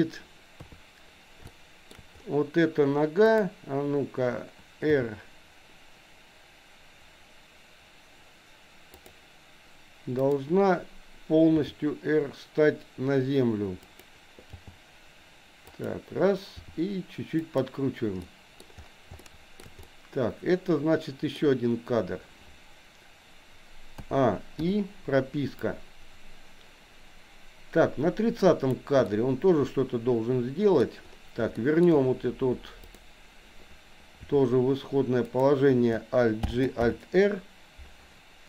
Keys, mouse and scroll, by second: 0.6 KP_3, 1.5 shift+middle click, 3.3 click, 4.8 r, 10.2 click, 11.6 r, 14.6 g, 16.6 r, 18.2 middle click, 19.2 shift+middle click, 19.8-21.3 middle drag, 21.3-24.1 scroll down 1, 24.1 a, 24.6 i, 25.6-28.8 drag, 29.1-30.8 middle drag, 31.5 shift+middle click, 32.8 click, 34.1 r, 36.5 alt+g, 37.0 alt+r.